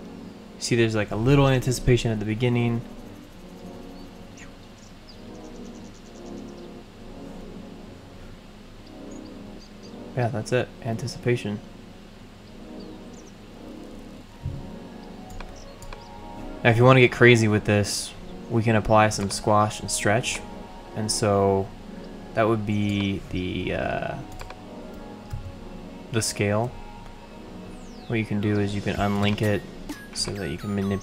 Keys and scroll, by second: 25.3 s.